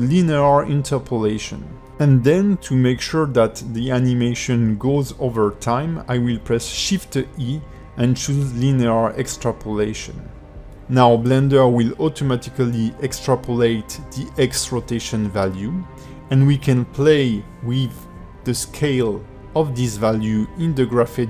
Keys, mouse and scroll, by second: 1.8 t, 4.2 shift+e, 10.5-10.9 scroll down 5, 11.0 ctrl+middle click, 11.8 click, 12.6 space, 13.8 click, 14.5 g, 18.5 click, 18.8 space, 19.3 space.